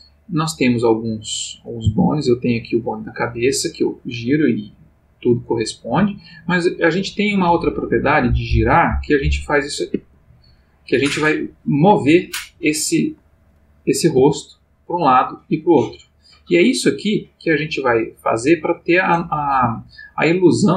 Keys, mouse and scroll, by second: 0.9 click, 1.8 r, 6.0 Escape, 8.4-10.5 drag, 9.9 Escape, 12.0 click, 12.5 g, 13.0 Escape, 13.4 click, 14.2 g, 19.5 Escape.